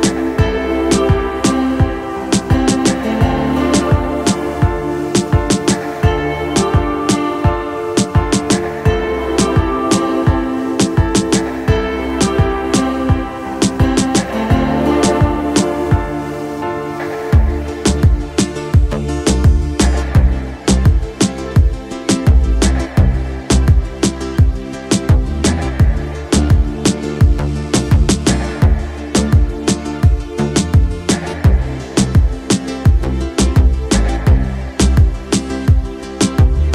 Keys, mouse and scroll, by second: 0.0 click, 0.7-3.4 middle drag, 3.8 middle click, 5.0-7.9 middle drag, 8.8-14.4 middle drag, 14.9-17.5 middle drag, 18.1 z, 18.6-20.0 middle drag, 20.5 middle click, 21.7-24.4 middle drag, 25.3-27.0 middle drag, 27.6 middle click, 28.6 z, 29.5 shift+middle click, 30.0-32.8 middle drag, 33.4 shift+middle click, 33.8 middle click, 34.6 middle click.